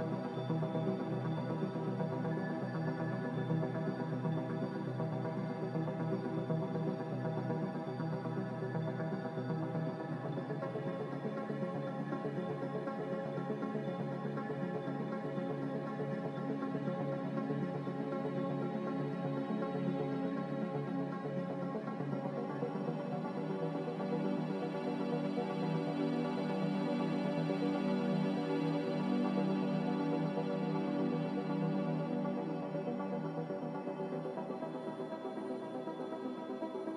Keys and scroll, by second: 5.4 ctrl+z, 14.5 s, 20.2 a, 26.4 ctrl+c, 26.8 ctrl+v, 29.0 a, 33.6 x, 36.1-36.9 typing, 36.4 Return.